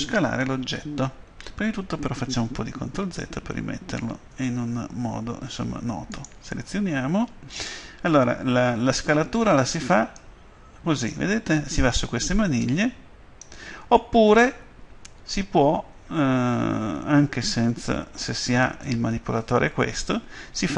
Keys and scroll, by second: 2.4 ctrl+z.